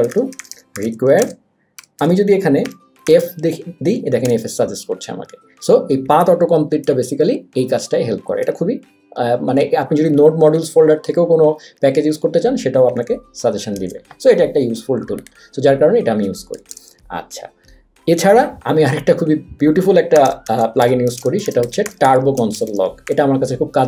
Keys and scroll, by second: 0.0-3.0 typing, 4.2 Return, 6.9 super+z, 13.8 super+w, 16.7 BackSpace, 20.0-22.9 typing.